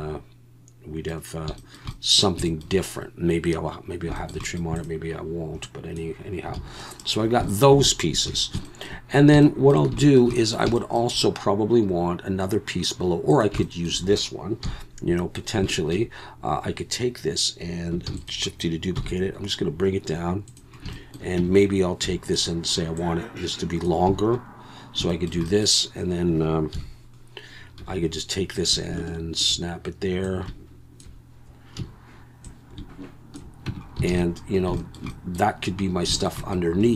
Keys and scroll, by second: 6.6 alt+a, 8.3 ctrl+s, 14.6 KP_1, 18.1 shift+d, 19.0 g, 21.4 Tab, 22.0 2, 24.1 a, 26.7 KP_1, 27.8 1, 31.8 a, 33.7 Tab, 34.1 alt+a.